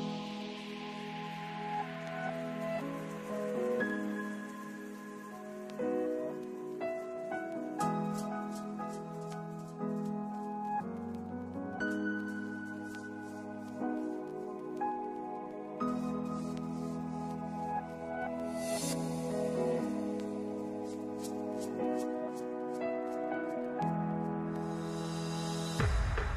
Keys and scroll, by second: 7.8 2, 8.2 0, 12.1 0, 13.8 ctrl+s, 16.3 ctrl+s, 19.6 ctrl+d, 19.9 Return, 20.1-23.0 typing.